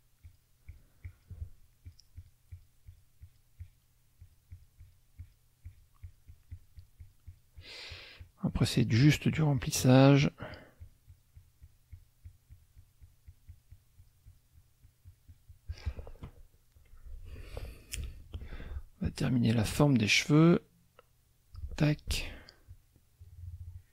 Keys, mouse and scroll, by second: 0.2 shift+click, 0.6 shift+click, 1.0 shift+click, 1.9 shift+click, 2.5-3.5 shift+drag, 4.2 shift+click, 5.2 shift+click, 5.7 shift+click, 10.2 shift+click, 10.5-12.2 shift+drag, 16.1 shift+click, 19.7-21.8 shift+drag, 22.6-23.9 shift+drag.